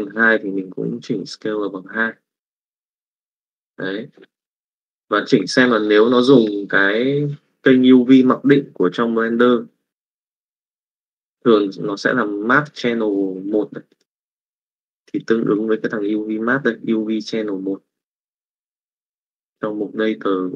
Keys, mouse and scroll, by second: 5.7 middle click, 9.5 click, 16.0 click.